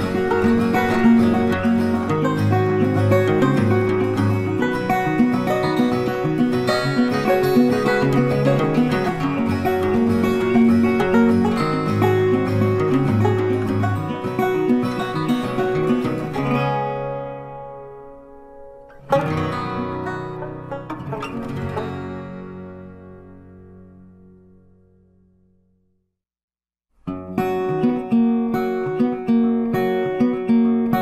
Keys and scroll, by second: 0.2 Delete, 1.2 ctrl+d, 2.1 ctrl+d, 14.7 ctrl+d.